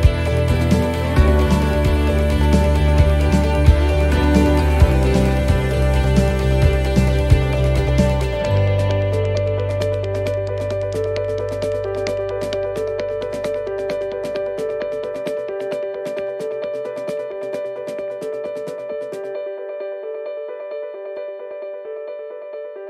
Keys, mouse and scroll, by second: 0.0-1.0 typing, 2.3 l, 2.3 x, 5.5 right click, 6.6 l, 7.2 l, 8.8 shift+d, 9.8 click, 12.5 shift+d, 13.8 click, 17.2 shift+d, 20.4 click, 22.3-22.8 scroll up 4.